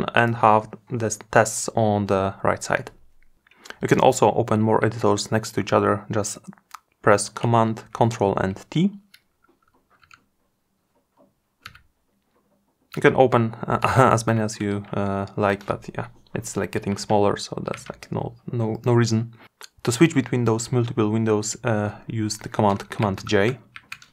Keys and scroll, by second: 7.0 ctrl+super+t, 22.5 super+j.